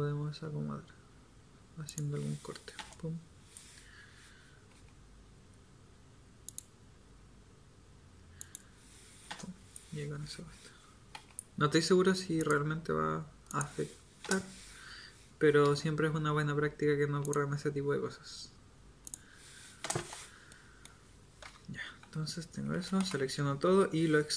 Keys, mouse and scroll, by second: 4.7 k, 11.1 k, 15.7 k, 21.4 Tab, 22.0 Tab, 22.7 a.